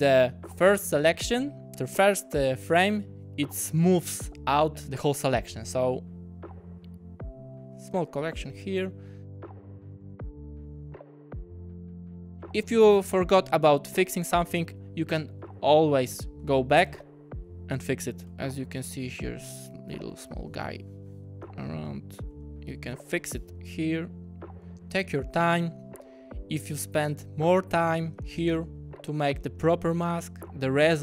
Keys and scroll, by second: 1.7 w, 8.2 w, 9.9-12.2 typing, 16.4 q, 17.7 w, 21.2-23.2 typing, 27.2 w.